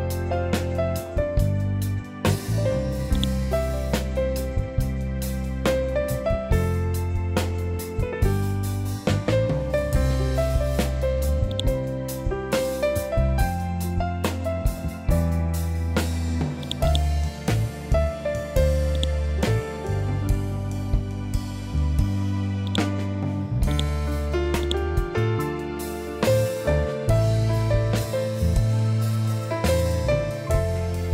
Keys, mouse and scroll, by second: 11.4 right click, 16.5-23.6 drag, 23.6 right click, 24.5 click, 25.0 ctrl+z.